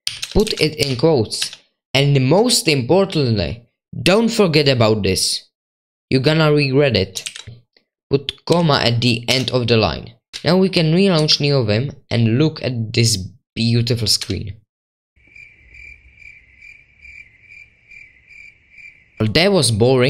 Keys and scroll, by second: 0.0-0.9 typing, 1.4 Escape.